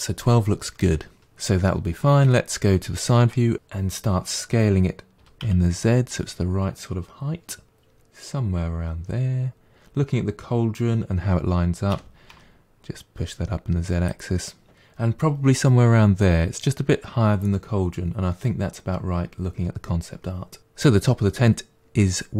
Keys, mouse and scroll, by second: 2.3 KP_1, 5.2 s, 11.9 g, 20.6-21.6 middle drag.